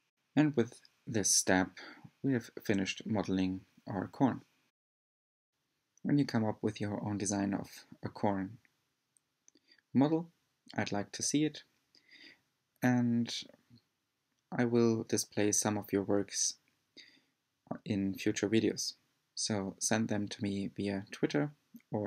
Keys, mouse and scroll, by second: 7.0-7.6 scroll up 3, 7.6-8.3 shift+middle drag, 8.3-8.8 scroll down 2, 8.8-11.5 middle drag, 11.5-13.3 scroll down 7, 13.3-16.3 middle drag, 18.2-19.8 middle drag.